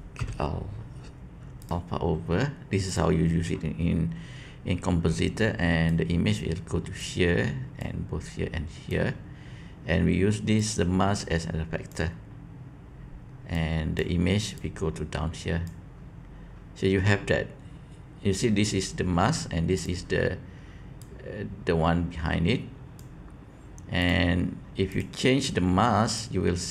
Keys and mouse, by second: 5.8-7.0 drag, 7.7-8.9 drag, 10.5-11.9 drag, 13.5 click, 15.3 click.